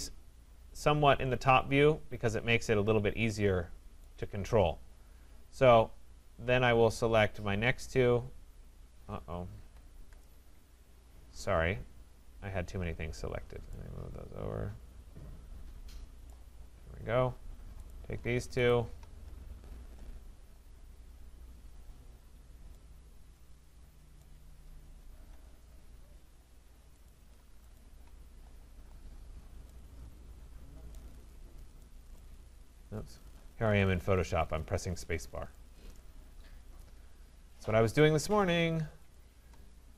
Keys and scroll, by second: 9.5 ctrl+z.